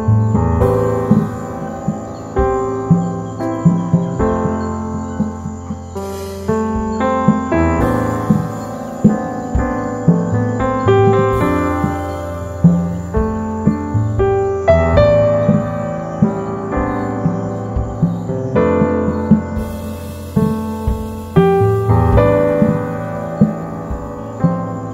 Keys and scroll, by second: 6.6 alt+space, 8.8 super+0, 18.7 super+c, 21.1 alt+shift+super+v, 22.7 super+a, 22.9 super+c, 23.3 alt+shift+super+v, 23.6 super+t, 24.0 super+-, 24.3 super+-, 24.5 super+-.